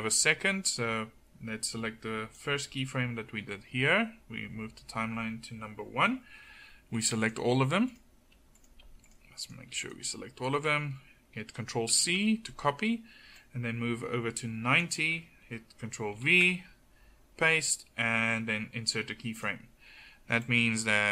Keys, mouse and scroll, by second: 12.0 ctrl+c, 13.4-15.2 drag, 16.2 ctrl+v.